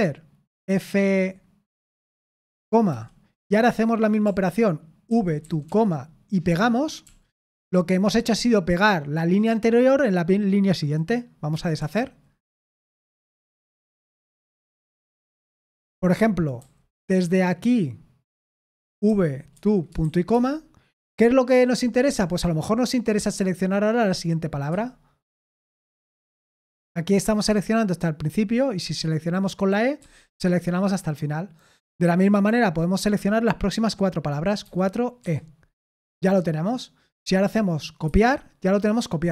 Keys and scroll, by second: 2.2-7.0 typing, 11.8 typing, 13.2-16.6 typing, 18.8-20.5 typing, 24.7 w, 25.6 w, 30.0 e, 34.6-35.2 typing, 38.0 typing.